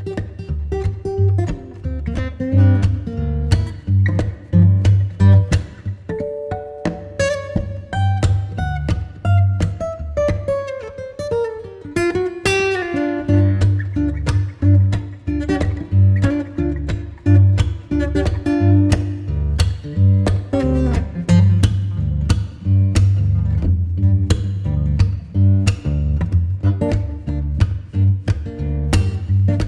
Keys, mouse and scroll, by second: 0.0 alt+w, 0.2 scroll down 1, 0.5 alt+middle click, 6.8 middle click, 9.0 Escape, 11.4 alt+middle click, 15.0 middle click, 16.6 middle click, 17.8 middle click, 23.3 middle click, 26.5 middle click.